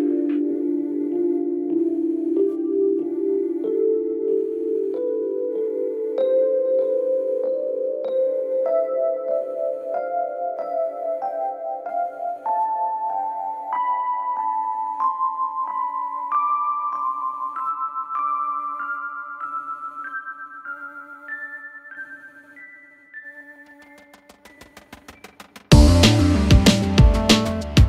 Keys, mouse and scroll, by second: 0.2 z, 0.7-2.9 drag, 2.9 p, 4.2 space, 4.6 click, 4.7 space, 7.5 space, 12.9 click, 23.3 click, 25.8 click.